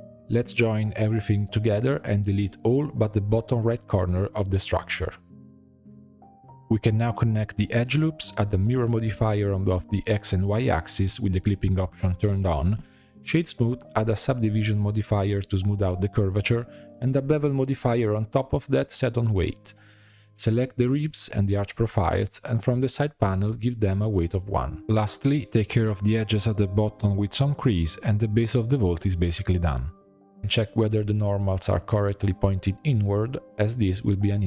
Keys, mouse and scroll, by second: 0.0-0.7 drag, 0.7 ctrl+j, 0.9-1.5 shift+middle drag, 1.5 Tab, 1.6 2, 1.8 click, 2.9 shift+click, 3.1 middle click, 3.4 ctrl+click, 3.6 middle click, 4.0 shift+click, 4.7 x, 5.1 middle click, 5.7 2, 6.1 click, 6.8 f, 7.1 click, 7.2-7.6 f, 7.9 middle click, 8.2 click, 8.9-9.8 typing, 9.1 click, 9.9 middle click, 10.1 Tab, 10.5-11.7 drag, 12.0 click, 12.6-13.1 right drag, 13.1-13.9 middle drag, 13.9-17.9 drag, 18.4-20.4 drag, 20.4 middle click, 20.7 click, 20.8 Tab, 20.9 2, 21.3 click, 21.8 alt+shift+click, 23.4-24.4 drag, 24.4 Tab, 24.6-25.0 middle drag, 25.0-25.3 scroll up 3, 25.3 Tab, 25.5 2, 25.6 click, 26.3 shift+e, 27.2 click, 27.7 shift+e, 28.2 Tab, 28.4 scroll down 5, 28.6 drag, 28.8-30.9 middle drag, 30.9-31.8 drag, 31.8 middle click, 32.8 click, 33.6-34.4 middle drag.